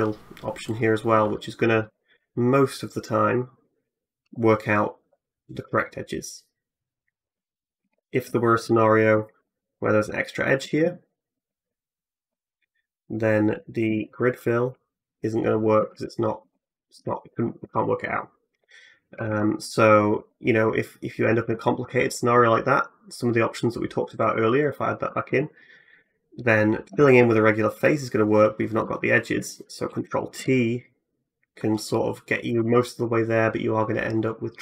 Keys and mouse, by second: 2.0-7.2 drag, 7.6 ctrl+z, 7.8 click, 8.5 click, 9.3 ctrl+r, 9.3-10.9 ctrl+drag, 10.9 alt+middle click, 11.0-15.7 alt+drag, 13.7 ctrl+f, 15.7 ctrl+z, 16.3 ctrl+z, 16.8 ctrl+z, 18.9 a, 19.1 a, 20.0 ctrl+z, 21.5 alt+click, 23.0 click, 24.0 ctrl+r, 25.6 alt+middle click, 26.7 f, 29.7 ctrl+t, 32.3 alt+j.